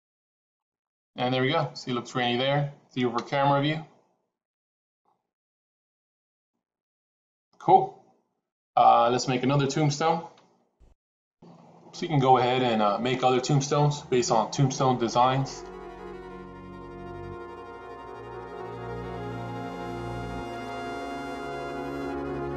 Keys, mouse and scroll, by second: 1.8-2.8 middle drag, 3.6 KP_0, 6.3 click, 11.7-15.0 typing, 12.4 Tab, 12.4 click, 12.6 click, 15.6 shift+click, 16.2 g, 16.6 middle click, 16.8 e, 16.9 middle click, 16.9 KP_1, 17.0 s, 17.2 middle click, 17.4 click, 17.6 click, 17.8 middle click, 17.9 Tab, 18.2-22.5 typing, 18.6 Tab, 19.1 ctrl+a, 20.2 Tab, 20.3 KP_Add, 20.6 middle click, 21.1 middle click, 21.2 click, 21.3 middle click, 21.4 click, 21.5 shift+middle click, 21.8 right click, 21.9 Tab, 22.0 shift+middle click, 22.1 click.